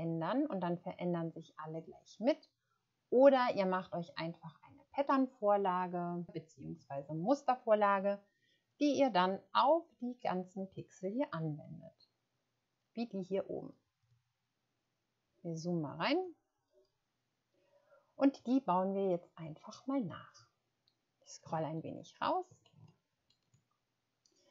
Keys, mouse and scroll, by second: 16.1 click, 22.2 ctrl+scroll down 1, 22.7-23.1 ctrl+scroll down 2, 23.7 shift+scroll down 4.